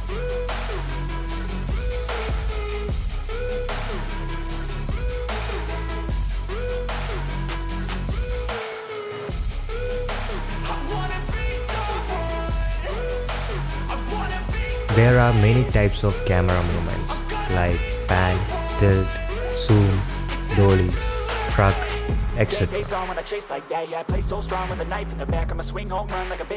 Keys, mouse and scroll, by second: 0.3 KP_Decimal, 0.9-2.8 drag, 3.0-3.3 middle drag, 3.9 ,, 4.4 middle drag, 4.8 drag, 5.3 click, 6.5 click, 7.9 click, 9.2-10.9 drag, 11.4 click, 12.5 i, 13.3-16.0 drag, 16.3 click, 16.5 click, 17.2 click, 17.8 click, 18.6 click, 18.9 click, 19.5 click, 21.0-25.1 drag, 25.8 click.